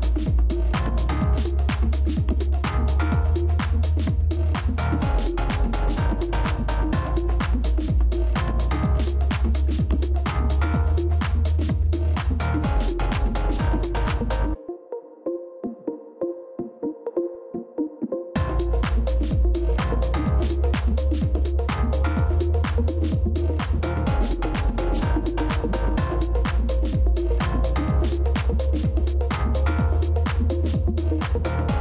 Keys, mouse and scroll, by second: 8.4 ctrl+-, 8.5 ctrl+-, 8.7 ctrl+-, 9.2 space, 11.9 ctrl+space, 12.0 ctrl+click, 12.7 space, 24.4 ctrl+z, 26.5 ctrl+space, 26.6 ctrl+click, 27.2 space, 31.2-31.5 scroll down 1.